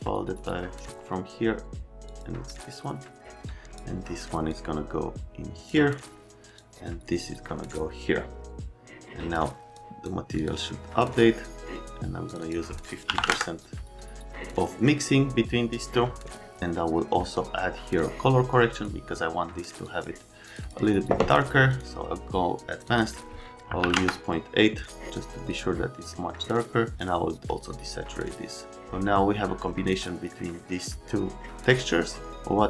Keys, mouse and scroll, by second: 5.7 click, 6.5 click, 9.7 click, 10.3 click, 10.5 click, 11.1 click, 12.3 right click, 12.4 right click, 13.1 KP_5, 13.2 KP_0, 13.3 Return, 17.9 click, 19.8 click, 20.4 click, 20.6 click, 21.7 click, 22.7 middle click, 22.8 middle click, 23.8 KP_8, 31.6 click.